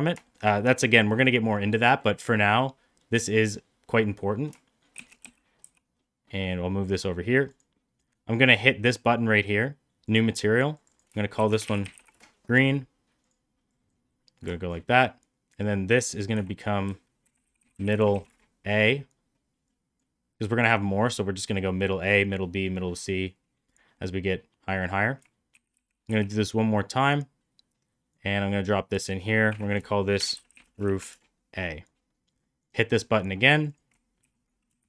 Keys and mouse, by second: 0.1 shift+middle click, 4.9 shift+d, 10.0 click, 10.8-12.6 shift+drag, 11.7 e, 14.4 shift+middle drag, 16.2 F2, 17.5 d, 19.6 click, 23.9 middle click, 25.4 shift+d, 28.0-28.5 drag, 29.4 F2, 30.4 o, 32.6 click, 33.4 click, 33.6-34.8 drag.